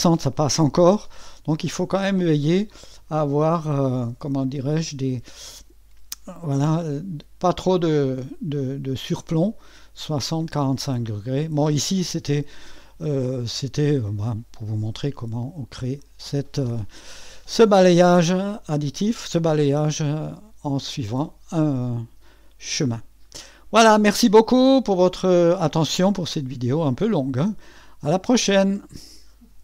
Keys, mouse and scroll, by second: 3.2 KP_3, 3.9 KP_2, 5.1 typing, 7.9-8.9 drag, 9.2-10.7 drag, 11.2-12.8 drag, 13.0-14.1 drag, 13.0 typing, 14.9-16.0 drag, 21.5-22.9 drag, 28.1 right click.